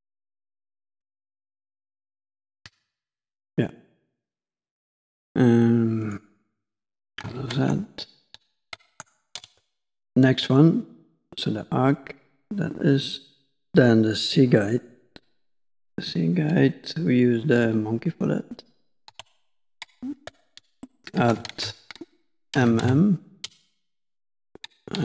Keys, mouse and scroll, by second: 1.7 middle click, 6.1 click, 7.4 ctrl+z, 8.6 ctrl+z, 18.6 click, 19.2 Tab, 20.3 x, 20.9 middle click, 21.4 shift+a, 22.9 m, 23.7 scroll up 2, 24.0 middle click, 24.8 KP_5.